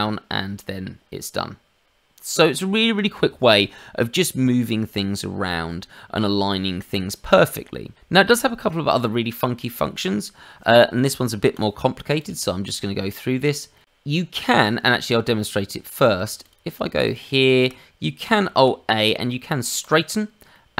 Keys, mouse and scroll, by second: 4.4 middle click, 7.9 middle click, 11.5 click, 12.1 click, 14.9 middle click, 16.0 click, 16.3 shift+click, 16.7 shift+click, 17.0 shift+click, 17.3 shift+click, 18.4 alt+a, 20.5 middle click.